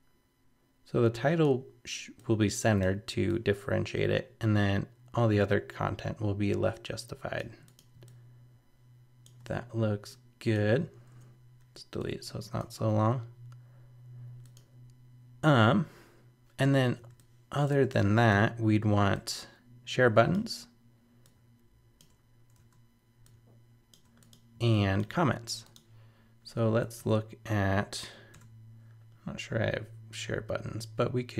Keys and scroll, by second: 22.6 super+z, 27.0 super+-.